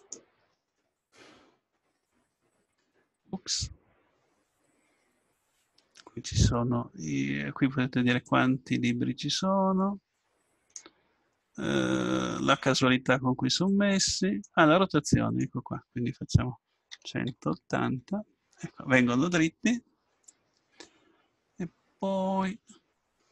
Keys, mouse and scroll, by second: 3.1-4.9 drag, 8.2-10.0 drag, 14.1-17.2 scroll up 1.